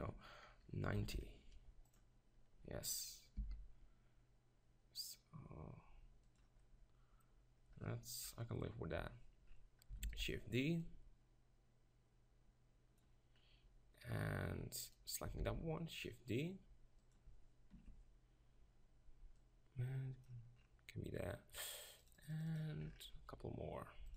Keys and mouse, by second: 3.4 g, 6.3-8.2 drag, 8.8 KP_7, 10.0 shift+d, 15.4 shift+d, 17.7 ctrl+KP_Decimal, 22.1-24.1 drag.